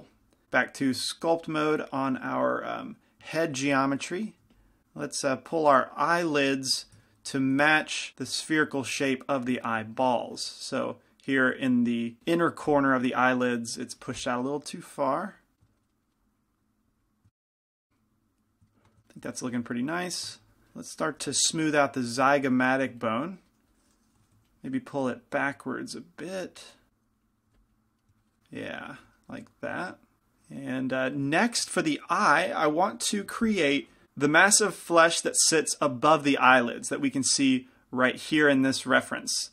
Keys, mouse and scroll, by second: 0.4-3.6 drag, 2.2-7.0 middle drag, 3.9 f, 4.6 f, 4.8-7.6 drag, 7.0 f, 7.3 middle click, 7.7 f, 8.5-10.2 drag, 9.2-10.2 middle drag, 11.7 f, 12.4 f, 13.1-16.0 drag, 14.1 f, 16.6-17.8 drag, 19.7 middle click, 19.7 f, 20.2 f, 20.4 ctrl+z, 21.5 f, 23.3 click, 24.5 f, 24.5 g, 27.3 click, 27.6 f, 34.0 f.